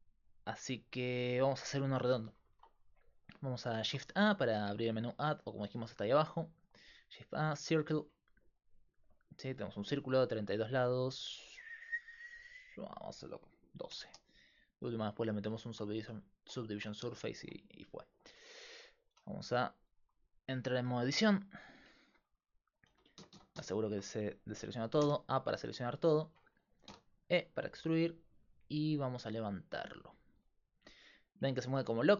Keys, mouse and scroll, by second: 2.5 shift+a, 3.9 shift+a, 6.1 shift+a, 10.4-14.0 drag, 19.1 e, 21.7-22.9 drag, 22.9-23.9 typing, 25.0 a, 26.9 e.